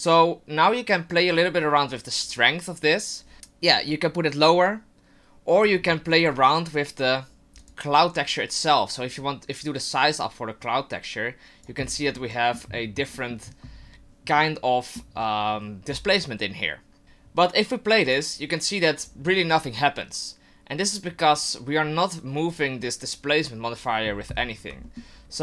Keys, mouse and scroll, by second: 3.9 click, 6.1 right click, 7.6 click, 9.5 click, 12.1 middle click, 13.1 middle click, 14.5 middle click, 18.1 click, 19.0 click, 22.5 click, 24.8 middle click.